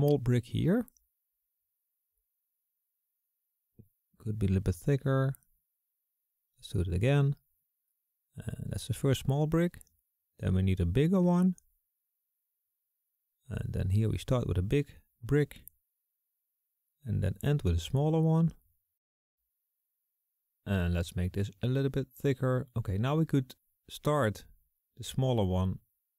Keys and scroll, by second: 3.8 ], 4.3 ].